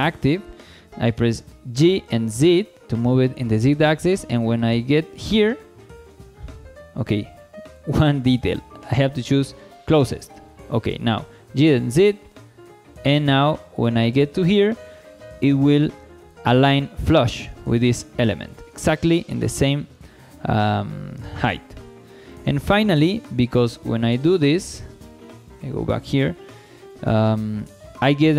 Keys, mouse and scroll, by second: 1.7 g, 2.0 z, 6.1 right click, 7.7-10.4 drag, 11.5 g, 11.7 z, 16.2-18.0 drag, 18.0 scroll down 2, 18.3 shift+middle click, 19.8 scroll up 2, 20.0 shift+middle click, 22.1 shift+middle drag, 22.6-24.2 scroll up 2, 24.2 z, 25.1 shift+middle click, 25.4 click, 26.3 scroll down 1, 26.7 shift+middle drag, 27.3 scroll up 2, 27.7 shift+middle drag.